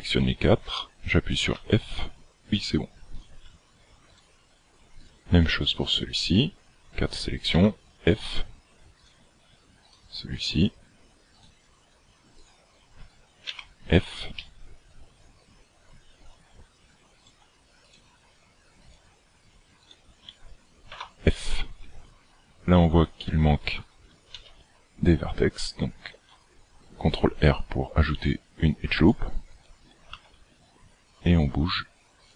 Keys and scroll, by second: 1.8 f, 7.8 f, 13.8 f, 21.0 f, 24.4 ctrl+r, 30.4 g.